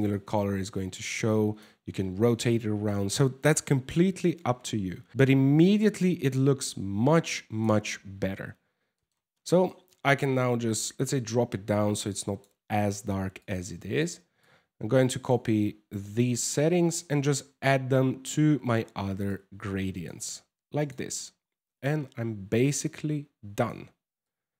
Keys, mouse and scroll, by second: 1.9 middle click, 3.4 KP_0, 4.1 scroll up 4, 5.0 scroll down 3, 5.5 click, 8.5 middle click, 8.9 scroll down 4, 9.1 middle click, 10.4 click, 13.0 click, 14.0 click, 15.7 ctrl+c, 16.5 right click, 17.5 ctrl+v, 18.9 click, 20.4 right click, 21.4 ctrl+v, 22.5 click, 23.8 click.